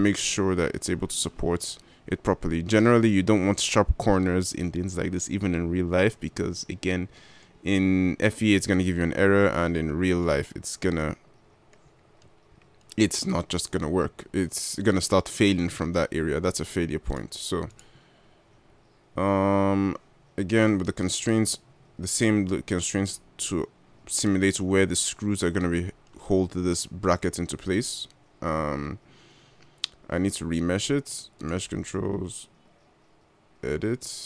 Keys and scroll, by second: 18.9 g.